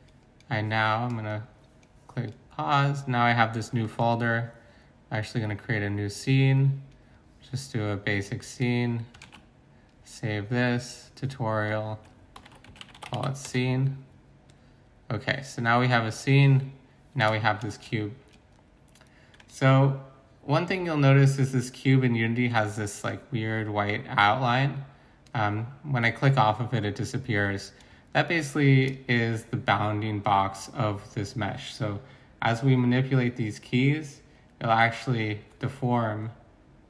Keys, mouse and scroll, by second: 9.2 ctrl+s, 12.4-13.1 typing, 13.4 Return, 16.5-17.6 typing.